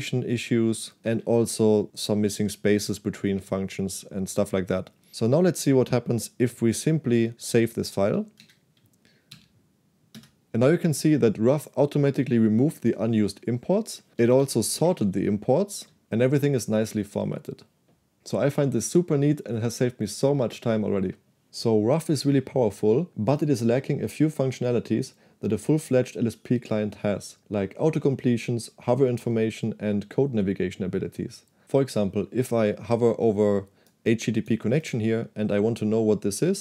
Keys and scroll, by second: 0.0-1.2 typing, 8.5 shift+;, 9.3 w, 10.2 Return, 14.2-15.6 typing, 15.9 Escape.